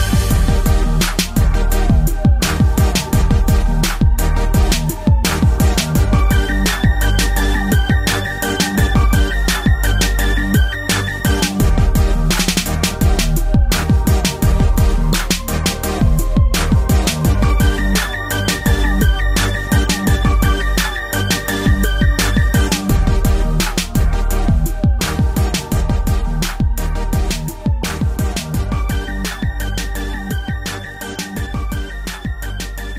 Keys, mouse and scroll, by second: 0.7 3, 2.4 click, 2.5 click, 6.0 shift+middle click, 6.5 scroll up 1, 9.1 click, 12.0-12.4 typing, 13.8 y, 19.0-20.7 typing, 22.2 typing, 25.3 Escape, 26.1 middle click, 26.6 middle click, 26.8 shift+middle click, 27.0 middle click, 27.0 scroll up 1, 27.5-28.2 typing.